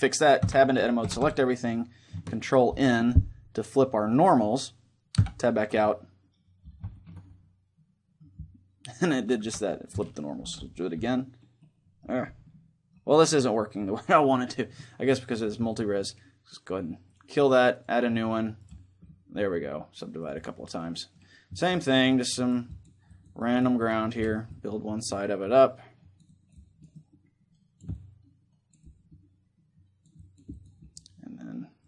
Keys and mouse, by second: 0.1 Tab, 0.7 a, 0.9 a, 2.4 ctrl+n, 4.9 Tab, 5.5-10.1 middle drag, 9.1 Tab, 10.1 ctrl+n, 10.7 Tab, 11.3-14.7 middle drag, 15.5-17.2 middle drag, 16.9-19.3 drag, 18.7-23.9 middle drag, 19.9-31.8 drag.